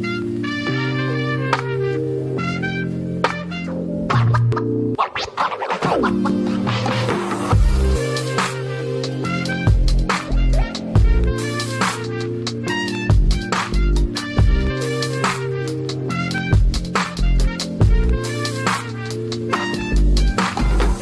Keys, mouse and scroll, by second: 8.3 double click, 10.2 scroll down 1, 11.0 scroll up 1, 15.9 double click, 17.6 double click, 19.5-19.9 scroll down 1, 19.9 scroll up 1, 20.3-20.9 scroll down 1.